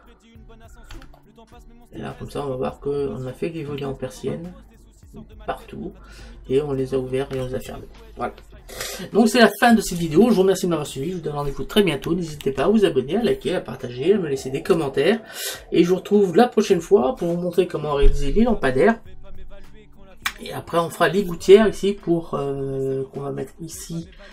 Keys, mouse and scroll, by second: 12.6 shift+z.